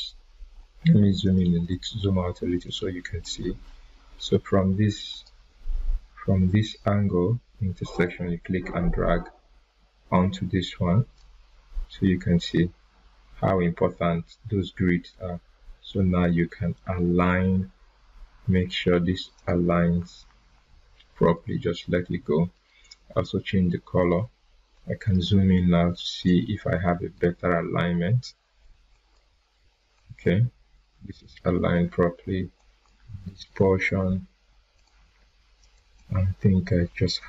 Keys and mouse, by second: 1.2 click, 1.6 right click, 2.6-3.2 drag, 7.9-11.3 drag, 19.3 click, 22.5 right click, 24.0 click, 27.1 right click, 28.9 click, 31.1 right click, 32.5 click.